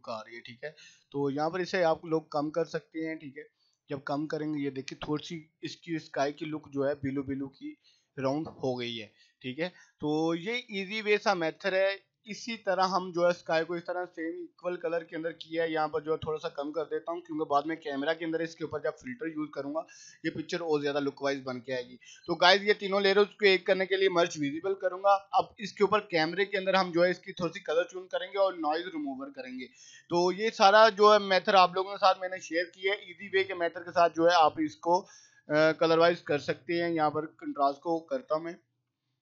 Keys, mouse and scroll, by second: 11.3 click, 13.0 right click, 13.3-17.4 drag, 19.9 right click, 20.1 click, 22.7 right click, 24.0 click, 26.5 click, 34.8-35.8 drag.